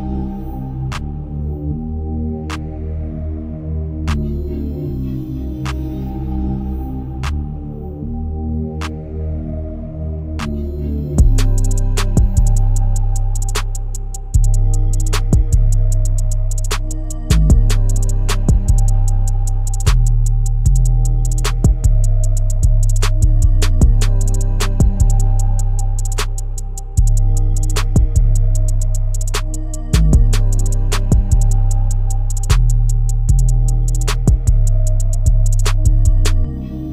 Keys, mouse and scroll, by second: 12.2-14.7 drag, 34.3 click, 35.8 z.